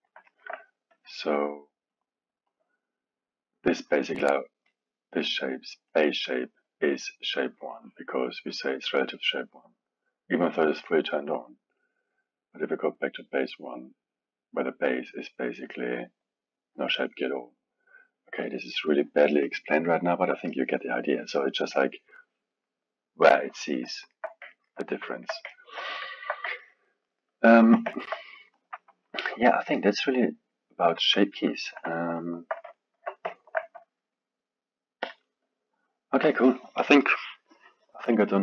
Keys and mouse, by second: 0.2-0.9 alt+middle drag, 0.9-2.0 drag, 2.4-5.5 drag, 5.9-9.0 drag, 10.7 click, 11.3-14.8 drag, 15.3-15.8 drag, 17.6 click, 17.9-18.9 drag, 19.9-23.5 drag, 23.9-31.0 alt+middle drag, 31.9-36.3 alt+middle drag.